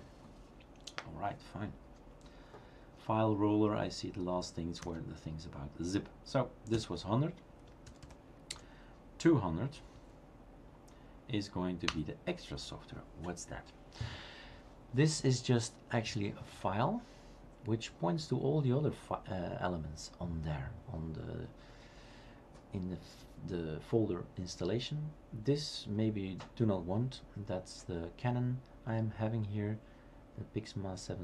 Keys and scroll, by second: 4.8 Up, 6.8 Down, 9.6 typing, 10.0 Tab, 11.9 Return.